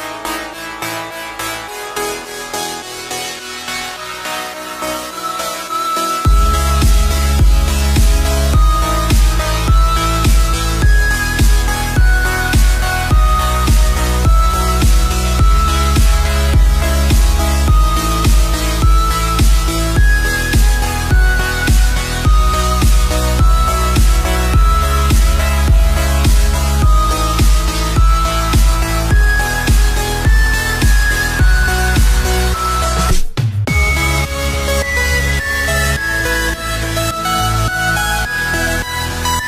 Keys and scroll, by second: 3.0 ctrl+-, 4.2 space, 6.8 space, 8.3 ctrl+=, 8.8 space, 10.9 ctrl+-, 15.1 space, 18.0 ctrl+=, 19.9 space, 20.1 ctrl+=.